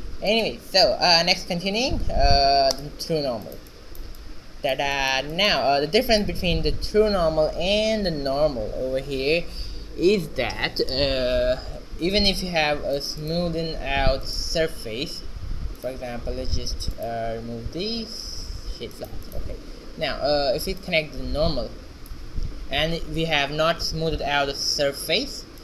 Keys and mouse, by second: 0.5 shift+z, 1.4-3.3 drag, 10.0 shift+z, 12.2 middle click, 15.7 z, 19.4-21.2 drag, 23.7 shift+z.